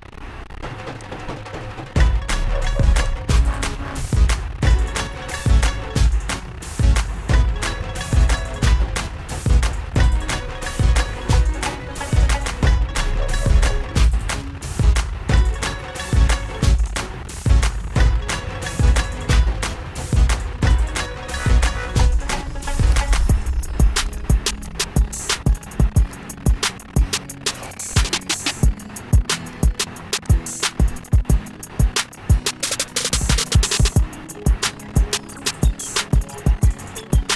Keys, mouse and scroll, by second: 1.3 click, 6.5 click, 11.8 click, 14.5-19.6 drag, 20.3-23.0 drag, 23.0 ctrl+-, 23.2 ctrl+-, 25.9 click, 29.7 click, 32.3 click, 33.8 click, 35.5 shift+click.